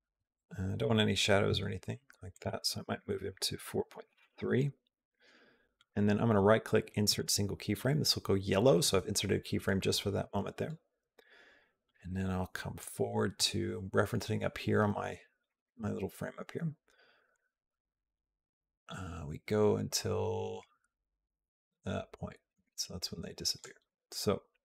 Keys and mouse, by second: 2.2-4.9 drag, 5.6-7.0 right drag, 12.6-13.2 drag, 17.2-23.5 drag.